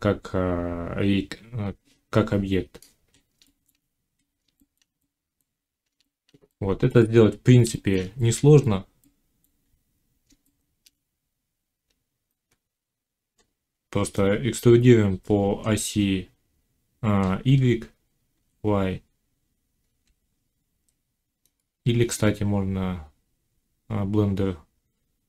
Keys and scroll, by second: 18.2 e, 19.8 y, 21.8 ctrl+z.